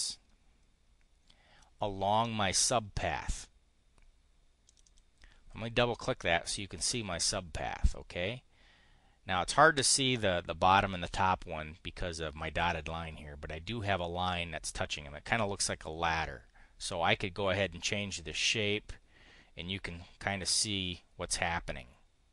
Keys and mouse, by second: 4.6 click, 16.7-22.3 drag.